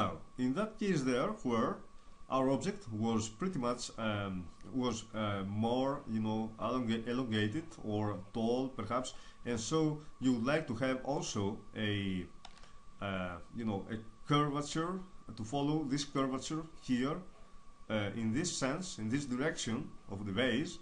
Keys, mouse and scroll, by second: 11.2-12.5 middle drag, 12.5 KP_0.